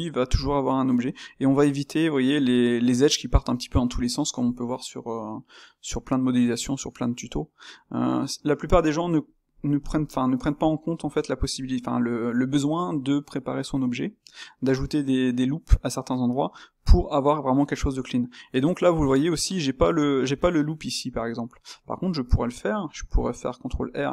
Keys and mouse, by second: 21.8 Tab, 23.7 ctrl+r.